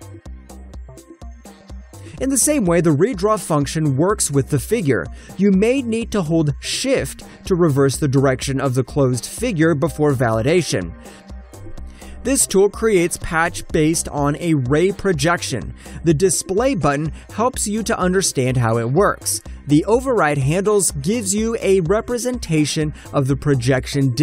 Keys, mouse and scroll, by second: 0.2 middle click, 0.3 shift+middle click, 2.6 alt+click, 2.9 alt+right click, 3.2 Return, 4.3 right click, 4.5 ctrl+shift+click, 5.7 alt+middle click, 6.7 click, 9.3 shift+middle click, 10.4 alt+middle click, 11.3 click, 12.6 alt+right click, 12.9 click, 13.7 Return, 14.1 alt+click, 14.4 alt+right click, 14.6 alt+click, 14.9 shift+middle click, 15.9 alt+click, 15.9 shift+middle click, 16.6 click, 16.7 double click, 17.4 Return, 17.4 1, 17.9 click, 19.8 click, 20.0 double click, 21.4 click, 21.5 double click, 22.0 shift+middle click, 24.0 click.